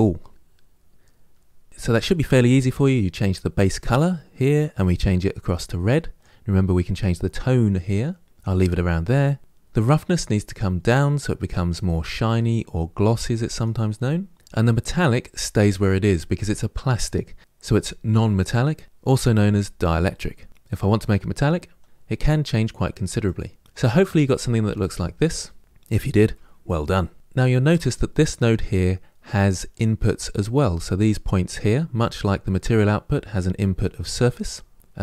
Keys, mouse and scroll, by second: 4.9 click, 10.1-35.0 drag.